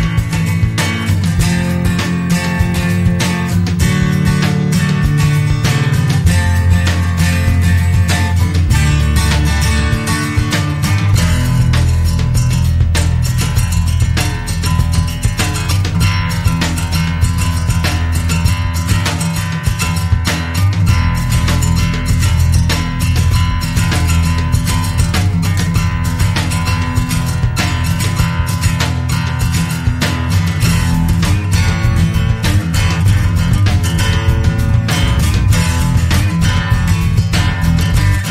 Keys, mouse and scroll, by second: 1.8 click, 2.5 click, 2.9 click, 4.1 click, 5.9 ctrl+click, 6.3 ctrl+click, 6.8 ctrl+click, 7.3 ctrl+click, 8.9 click, 10.9 click, 12.3 click, 14.2-15.4 scroll up 4, 16.2-16.6 scroll down 2, 16.8 click, 18.9-19.4 scroll down 1, 19.5 scroll up 1, 20.1 scroll down 1, 20.6-21.0 scroll up 1, 21.4 scroll down 2, 22.1 scroll down 2, 22.8 scroll up 2, 23.6 scroll up 2, 25.7 click, 31.1 click, 31.7-32.0 scroll down 2, 32.2 scroll up 2, 35.1 click, 36.2 click, 37.2 scroll down 2, 37.8-38.2 scroll up 1.